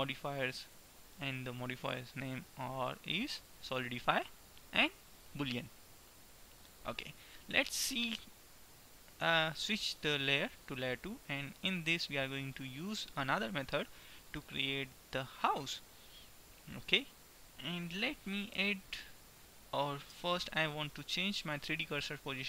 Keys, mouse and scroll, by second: 0.9-2.5 drag, 3.0-5.4 drag, 7.5-9.9 middle drag, 9.9-11.4 drag, 11.4-12.4 middle drag, 12.9-15.0 middle drag, 20.2 n, 21.5-22.4 drag.